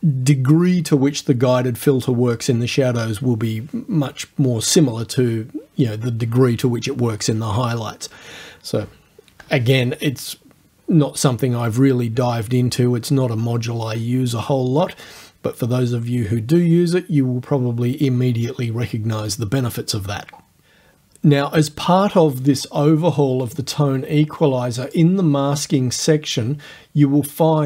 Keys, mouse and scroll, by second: 23.5 click, 24.9 click.